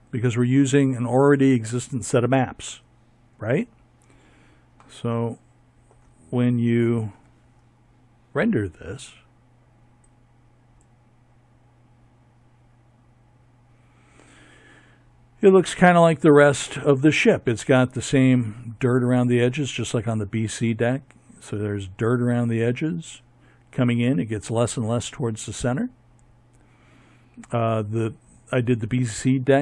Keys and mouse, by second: 4.9 Tab.